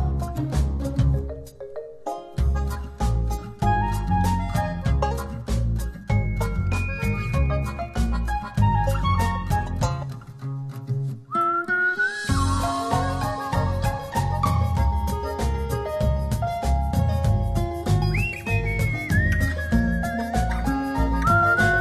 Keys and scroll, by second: 5.3 u, 16.1 space, 18.0 space.